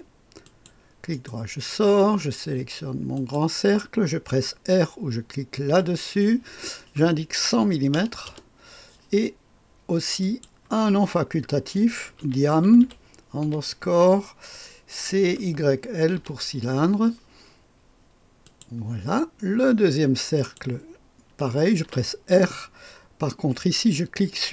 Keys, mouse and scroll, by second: 0.4 click, 1.1 right click, 3.1 click, 3.5 click, 5.7 r, 7.6 KP_1, 7.9 KP_0, 8.2 KP_0, 10.2 click, 11.8-13.4 typing, 15.2-16.2 typing, 18.4 click, 19.2 typing, 20.4 click, 20.7 typing, 21.8 typing.